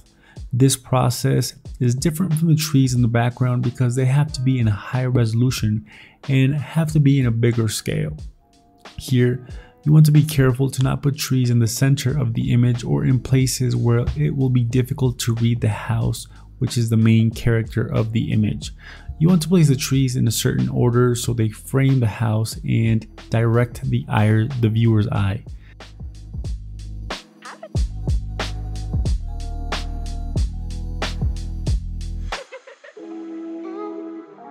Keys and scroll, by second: 1.4 alt+Tab, 2.4 ctrl+t, 2.9 ctrl+t, 3.5 alt+Tab, 4.2 alt+Tab, 5.2 ctrl+t, 5.4 ctrl+t, 6.1 ctrl+t, 6.2 Escape, 6.7 ctrl+t, 7.5 alt+Tab, 10.4 BackSpace, 10.9 alt+Tab, 14.5 alt+Tab, 15.3 ctrl+t, 15.3 Escape, 16.3 Delete, 16.5 ctrl+t, 16.7 Escape, 17.4 b, 18.2 alt+Tab, 20.3 alt+Tab, 20.9 BackSpace, 21.3 BackSpace, 21.6 BackSpace, 21.7 BackSpace, 21.9 alt+Tab, 22.4 Delete, 22.9 alt+Tab, 23.1 BackSpace, 23.3 BackSpace, 23.5 BackSpace, 24.1 BackSpace, 24.6 alt+Tab, 24.8 Escape, 25.9 b, 26.2 ctrl+t, 26.5 alt+Tab, 26.7 BackSpace, 27.3 alt+Tab, 27.7 Delete, 27.9 alt+Tab, 28.3 alt+Tab, 28.9 b, 29.1 Delete, 29.2 alt+Tab, 30.3 ctrl+t, 30.8 ctrl+t, 31.3 ctrl+y, 32.7 b, 33.1 ctrl+j, 33.2 ctrl+t, 34.4 ctrl+j.